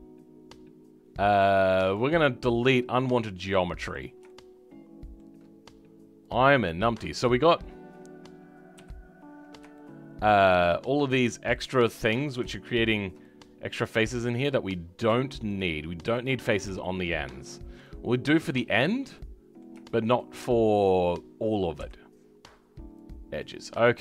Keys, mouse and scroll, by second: 1.8 click, 2.2-2.8 scroll up 2, 2.8-3.9 middle drag, 3.9 click, 4.2-6.3 shift+middle drag, 6.3 click, 6.8 scroll up 2, 7.3 scroll up 9, 7.6-8.7 scroll down 10, 8.7 KP_Decimal, 9.3-9.7 scroll up 2, 9.7-11.2 shift+middle drag, 11.2 click, 11.5-12.9 middle drag, 12.9 shift+click, 13.2-14.6 middle drag, 14.6-15.5 scroll up 2, 15.5 shift+click, 16.2 shift+click, 16.4-16.8 scroll down 2, 16.8-18.5 shift+middle drag, 18.5-19.1 scroll down 3, 19.1-23.0 middle drag, 23.0 Delete, 23.5 middle click.